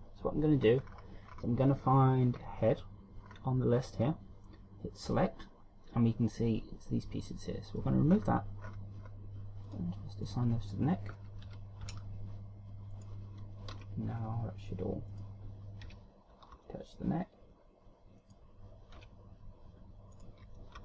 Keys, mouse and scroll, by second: 0.1 Tab, 1.2-2.1 scroll up 6, 2.2-3.4 scroll down 10, 3.9 scroll up 1, 4.5 click, 5.5 click, 8.2 click, 8.7-10.2 scroll up 7, 10.2 click, 10.8 click, 12.0 KP_1, 12.4 Tab, 13.5 right click, 14.3 r, 15.7 right click, 16.4 KP_3, 17.1 r, 19.5 KP_1, 20.7 right click.